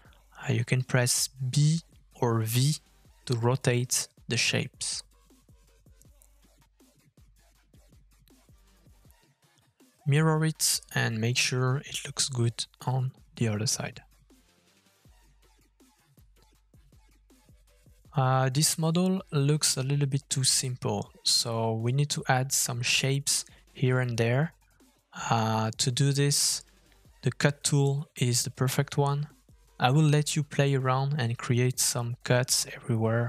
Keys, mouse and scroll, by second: 1.6 middle click, 5.2 middle click, 7.2 g, 10.5 middle click, 13.2 middle click, 13.7 scroll down 1, 13.9 middle click, 15.8 middle click, 19.3 shift+middle click, 21.9 shift+middle click, 22.2 middle click, 23.2 shift+middle click, 25.8 middle click, 27.2 shift+middle click, 27.6 middle click, 28.2 shift+middle click, 28.2 scroll up 1, 28.5 shift+middle click, 29.7 shift+middle click, 29.7 f, 30.0 shift+middle click, 30.8 shift+middle click.